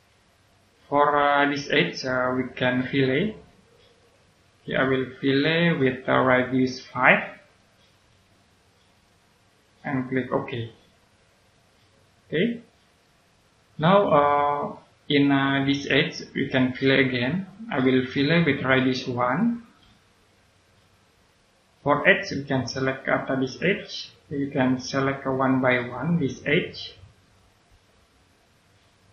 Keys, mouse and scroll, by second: 1.2 right click, 3.9 click, 7.8 5, 8.9 click, 12.1-13.0 scroll down 1, 13.0 right click, 14.7 middle click, 18.0 click, 20.1 1, 21.2 click, 24.2 click.